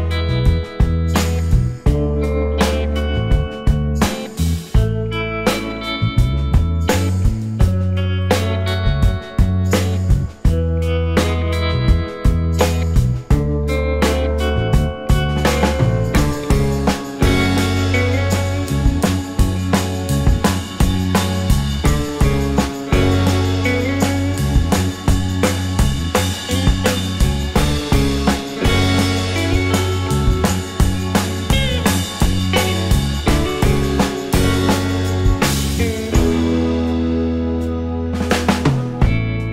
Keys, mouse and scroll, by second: 0.2 right click, 2.9 scroll down 1, 3.1 alt+click, 3.6-4.0 alt+scroll down 3, 6.4 scroll up 1, 10.0 shift+click, 11.5 r, 14.3 r, 14.9 alt+middle click, 15.3-16.1 alt+scroll up 2, 16.1 w, 18.7 w, 21.3 shift+scroll down 2, 21.6 alt+click, 22.1 alt+middle click, 22.4-24.5 alt+scroll up 2, 25.7 shift+click, 26.0 right click, 31.1 right click, 31.7 scroll down 1, 31.9 alt+click, 34.0 scroll down 1, 34.4 alt+click, 34.8 alt+scroll up 1, 35.2 alt+click, 35.5 alt+middle click, 35.6 alt+scroll up 2, 36.0 alt+click.